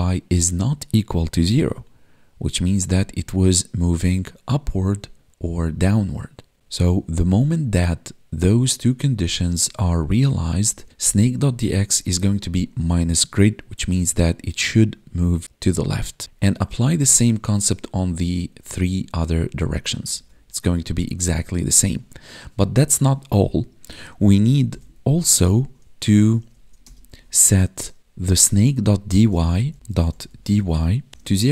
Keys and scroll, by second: 13.1 Tab, 20.3 Tab, 31.1 space.